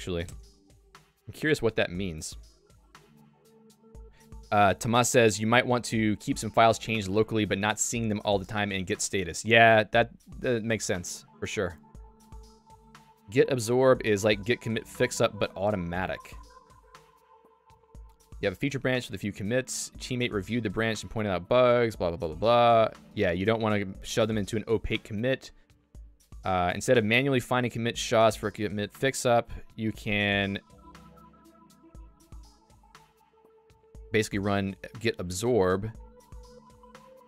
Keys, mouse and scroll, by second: 19.5 super+2.